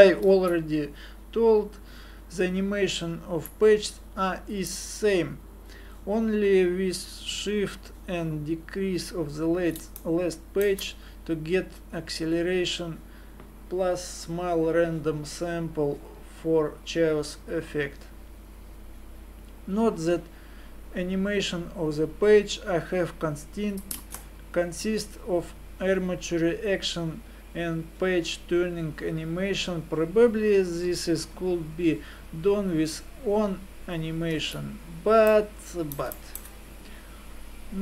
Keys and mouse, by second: 0.3 alt+a, 4.3-5.7 drag, 24.3 ctrl+space, 34.5 alt+a.